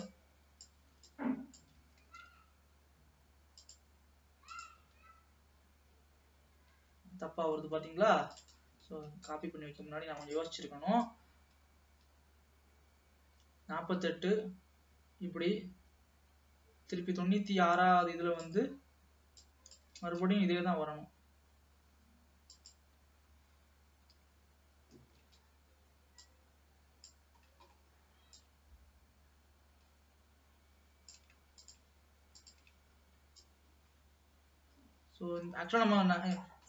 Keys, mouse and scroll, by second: 2.2 shift+d, 4.7 click, 5.1 space, 6.6 space, 7.8-8.5 scroll down 7, 8.6-9.9 drag, 9.9 Delete, 11.2-14.3 drag, 19.6 click, 20.5 shift+d, 25.1 ctrl+z, 26.3-27.6 drag, 27.6-28.7 scroll up 5, 28.7-31.5 drag, 31.7 shift+click, 32.5 shift+click, 33.6-36.6 drag.